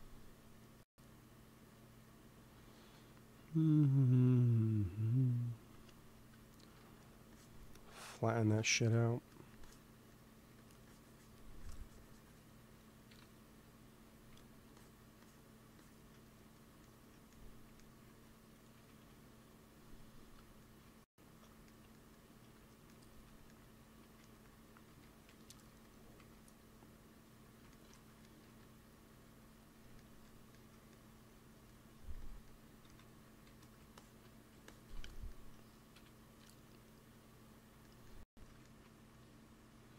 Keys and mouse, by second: 2.6-3.7 middle drag, 2.6 right click, 3.8 middle click, 6.7 f, 7.2-8.8 drag, 8.5 f, 9.1 f, 10.4 f, 13.0 KP_1, 14.2 f, 14.7-17.6 drag, 18.0 ctrl+s, 18.6 KP_1, 18.9 KP_3, 24.6 g, 24.8 f, 25.6 f, 26.1 f, 26.4-28.5 drag, 27.9 ctrl+z, 28.4 f, 29.1-30.9 drag, 32.0 f, 32.8 x, 33.4 f, 33.9-36.3 drag, 35.8 KP_1, 36.3 KP_3.